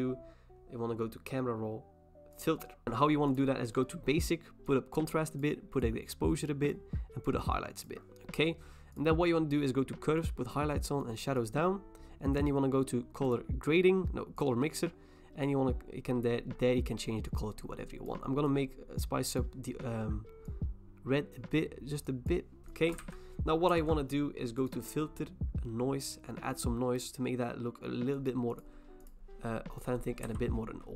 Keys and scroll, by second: 23.0 ctrl+e, 23.7 ctrl+j, 30.2 v.